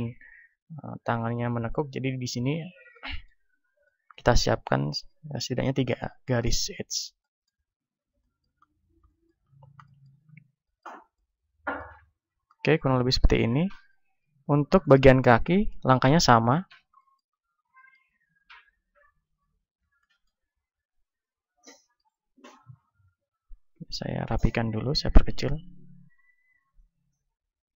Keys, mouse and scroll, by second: 2.8-15.5 middle drag, 14.1 ctrl+Tab, 15.5-17.8 right drag, 15.8-17.8 drag, 16.4 KP_1, 17.8 middle click, 19.4 z, 21.3 a, 22.0 ctrl+Tab, 23.7 b, 25.2 s, 26.9-27.7 drag, 27.2 s.